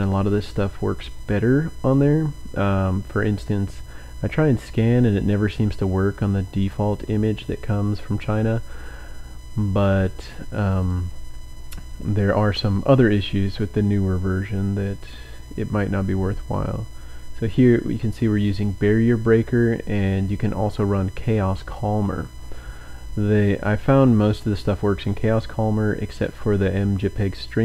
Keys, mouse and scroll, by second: 1.1 click, 1.5-1.9 scroll up 1, 3.8 click, 6.6 click, 10.8 click, 12.3-13.7 scroll down 6, 14.3-16.2 scroll down 3, 17.5-19.4 drag, 21.4-23.3 scroll up 4.